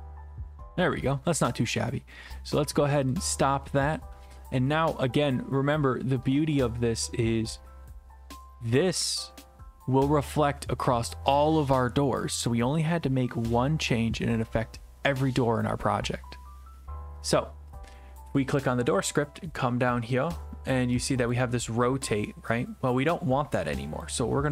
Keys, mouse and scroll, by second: 3.1 click, 5.2 click, 18.7 click, 19.5-20.7 scroll down 5, 21.3 click.